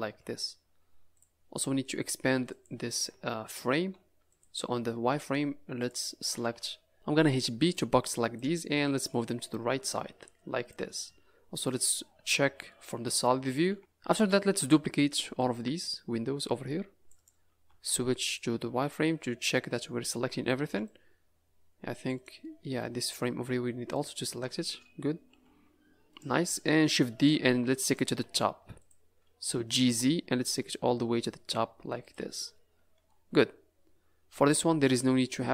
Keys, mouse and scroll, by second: 2.5 click, 3.1 Tab, 3.8 z, 5.8 click, 6.2 a, 6.4 a, 6.9 b, 7.1 b, 9.1 click, 11.0 z, 12.3 Tab, 12.6 middle click, 13.7 a, 14.0 a, 14.2 a, 14.5 c, 17.6 z, 18.7 middle click, 20.6 c, 22.4 middle click, 22.9-23.2 scroll up 2, 23.9 shift+click, 24.7-25.2 scroll down 1, 25.2 scroll down 1, 25.2 g, 26.5-26.9 scroll down 3, 27.5 shift+d, 28.3 z, 29.7 g, 32.4 middle click, 34.6 scroll up 3, 34.9 middle click.